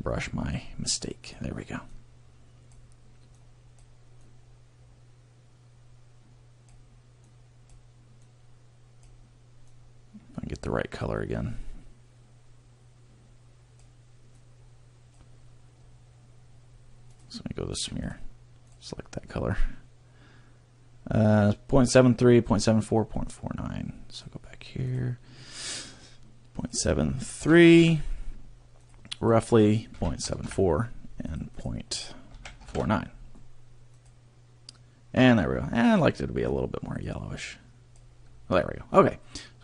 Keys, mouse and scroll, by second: 1.2 click, 18.1 click, 18.7 click, 24.9 click, 25.5 click, 35.7 click.